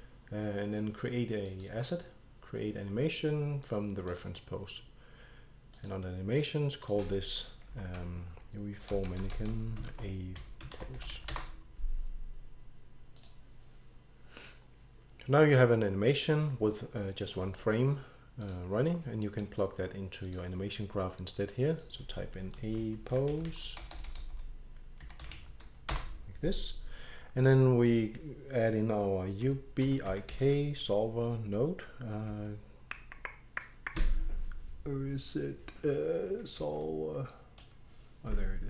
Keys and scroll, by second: 7.7 End, 8.0-11.6 typing, 13.1-14.2 typing, 22.6-26.2 typing, 29.2-30.8 typing, 36.6 shift+s.